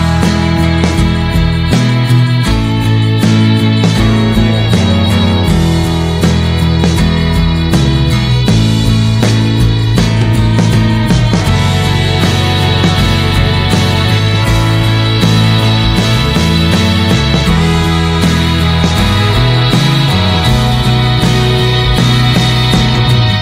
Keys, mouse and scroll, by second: 1.0-2.5 drag, 4.3-7.4 drag, 9.3 middle click, 10.1-10.4 scroll down 1, 10.4-15.4 middle drag, 15.4-17.1 drag, 17.7-18.8 middle drag, 18.8-20.1 scroll up 4, 20.1-20.4 scroll up 1, 20.4 click.